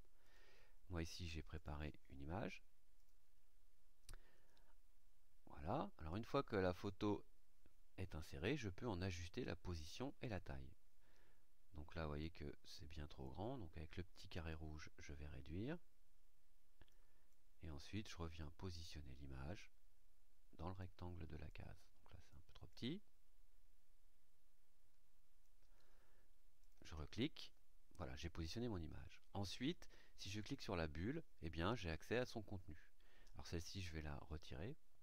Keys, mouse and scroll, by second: 0.2 click, 1.5 click, 2.9 click, 6.0 click, 6.8 click, 10.2 click, 12.1-13.4 drag, 14.4-17.0 drag, 17.2-20.9 drag, 21.4-22.4 drag, 22.6-25.6 drag, 26.5 click, 30.3 click.